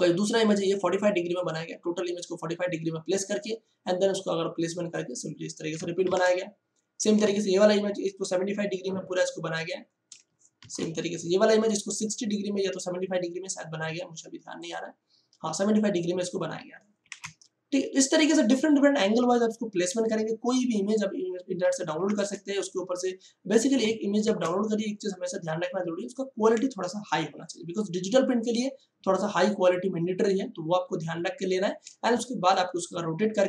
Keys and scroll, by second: 6.0 ctrl+shift+Tab, 10.5 ctrl+shift+Tab, 17.0 ctrl+shift+Tab, 22.0 ctrl+shift+Tab, 24.2 ctrl+shift+Tab, 32.1 ctrl+space, 32.7 ctrl+space, 33.0 ctrl+space, 33.3 ctrl+space.